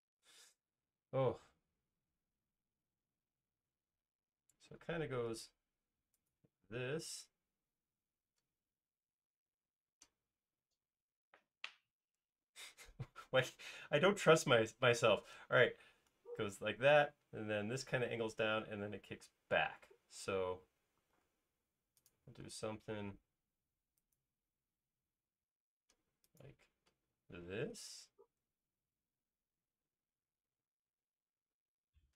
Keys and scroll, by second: 4.2 l, 6.9 space, 12.0 i, 20.4 space, 21.2 l.